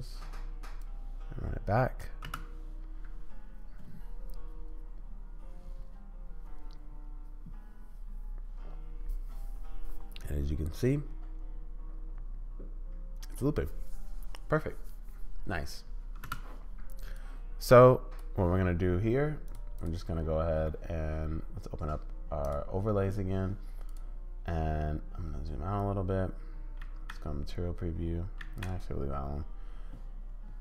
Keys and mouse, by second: 0.8-2.0 drag, 2.3 space, 16.2 space, 17.1-18.2 drag, 19.4 click, 19.8 click, 22.4 click, 26.8 z, 28.4 z.